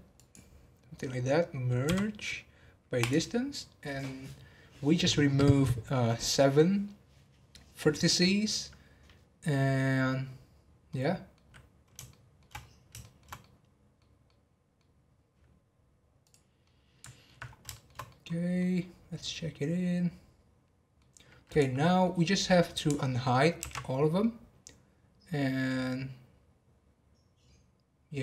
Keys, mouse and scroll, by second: 0.1 click, 10.2-10.9 scroll down 2, 10.9 middle click, 12.1 shift+middle click, 12.5-13.0 scroll down 1, 13.0-16.2 shift+middle drag, 16.2 click, 16.6 middle click, 17.4 scroll up 1, 17.7 shift+middle click, 18.6-19.2 scroll down 5, 19.2-21.4 middle drag, 21.4 click, 21.7-23.6 middle drag, 23.6 alt+h, 24.2-27.3 middle drag.